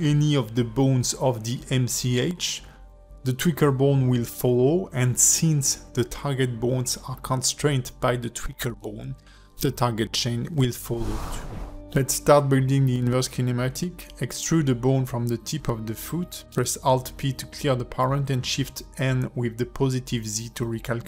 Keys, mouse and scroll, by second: 1.5 click, 3.0 r, 6.6 click, 7.0 g, 8.2 click, 8.6 g, 10.3 a, 10.7 alt+r, 11.0 alt+g, 11.3 alt+s, 12.3 scroll down 2, 13.2 click, 13.8 shift+middle click, 14.2 Tab, 14.5 click, 14.7-15.2 scroll up 2, 15.3 e, 16.9 click, 18.4 shift+n, 19.3 shift+middle click, 19.8 click, 20.2 scroll up 3, 20.6 click, 20.9 click.